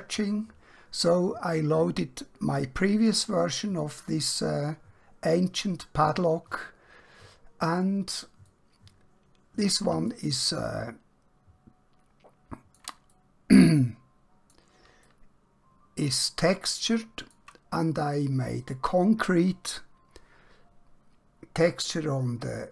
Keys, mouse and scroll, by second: 8.5 middle click, 10.8 shift+middle click, 13.3 middle click, 15.2 shift+middle click.